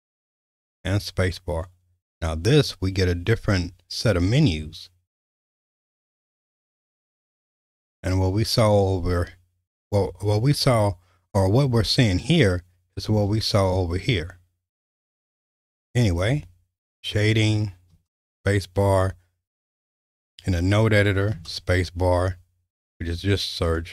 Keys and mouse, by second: 0.7 space, 13.1 space, 17.9 space, 21.3 space.